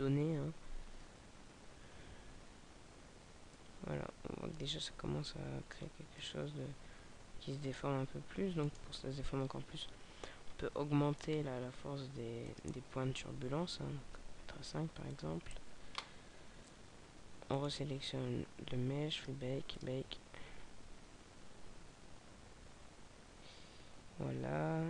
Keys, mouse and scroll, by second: 3.5 middle click, 6.1 middle click, 8.6 right click, 9.4-9.7 scroll up 2, 10.5 scroll up 3, 12.3 click, 12.3-13.1 scroll up 6, 17.6 right click, 19.1 click.